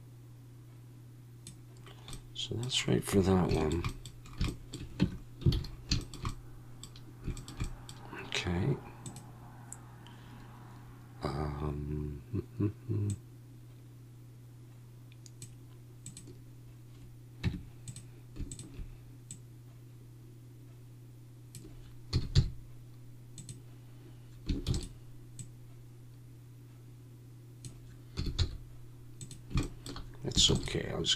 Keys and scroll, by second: 5.0 Tab, 5.5 alt+a, 17.4 Tab, 22.1 s, 22.3 x, 24.7 shift+d, 28.2 s, 28.4 x, 30.5 shift+d.